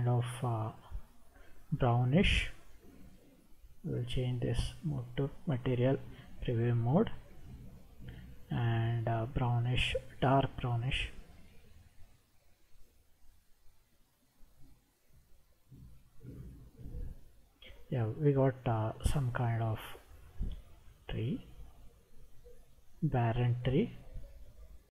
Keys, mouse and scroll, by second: 6.2 click, 8.7 click, 18.3-22.6 middle drag, 23.3-24.9 scroll up 3.